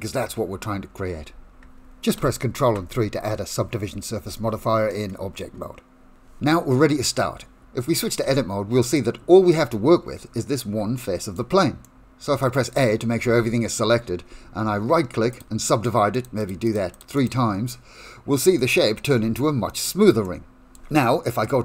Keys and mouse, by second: 2.1 ctrl+3, 4.9-6.1 middle drag, 8.2 Tab, 9.0 middle click, 11.0 shift+middle click, 11.8 middle click, 12.4 shift+middle click, 13.3 a, 15.3 right click, 16.4 right click, 16.9 right click, 17.8 middle click, 18.6 shift+middle click, 19.5 Tab, 19.5 right click, 20.1 Tab, 20.2 middle click, 21.0 shift+middle click.